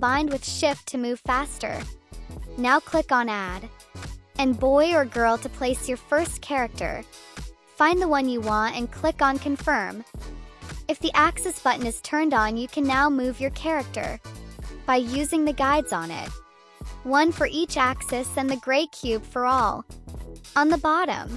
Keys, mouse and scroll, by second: 0.5 Up, 1.1 shift+Down, 1.4 shift+Left, 1.5 Right, 1.9 shift+Left, 2.2 shift+Right, 3.8 click, 5.1 click, 6.9 click, 8.5 click, 11.5 click, 12.0 right click, 13.0 click, 14.5 click, 15.9 click, 17.0-18.2 drag, 18.5 click, 19.5-20.6 drag.